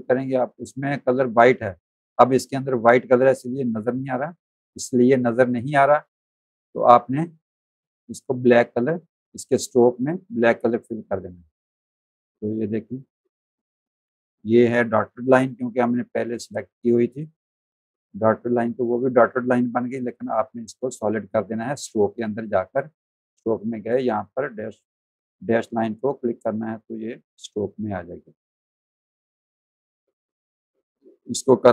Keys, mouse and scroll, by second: 0.0 click, 0.8 click, 2.6 click, 6.7 click, 10.5 click, 11.3 click, 12.1 z, 12.5 alt+click, 13.0 space, 13.1 click, 14.3 v, 14.6 click, 15.0 click, 16.1 space, 16.4 z, 16.5 click, 17.6 v, 17.8 click, 18.2 click, 20.0 click, 22.0 click, 26.2 click, 27.0 click, 27.7 z, 27.9 alt+click, 28.8 v, 29.0 click.